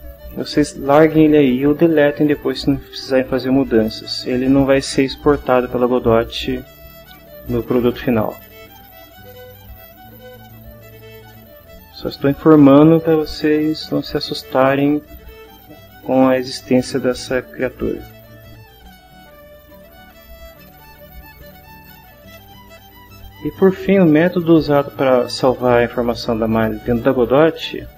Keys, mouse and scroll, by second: 16.9-17.5 drag, 18.5 ctrl+h, 19.8 click, 21.6 click.